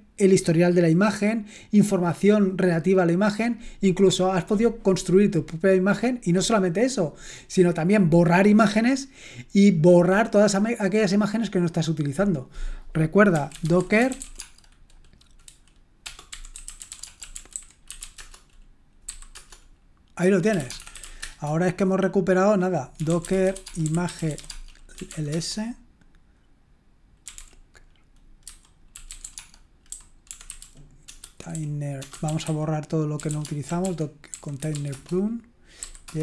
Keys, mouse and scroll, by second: 13.1-21.7 typing, 22.7-25.6 typing, 27.0-36.1 typing.